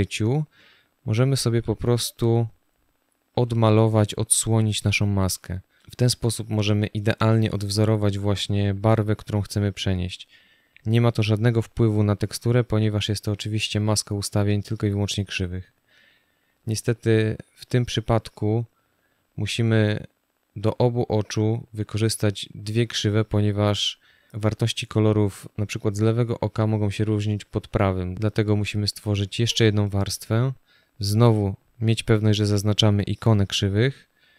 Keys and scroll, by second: 5.0 space, 18.8 space.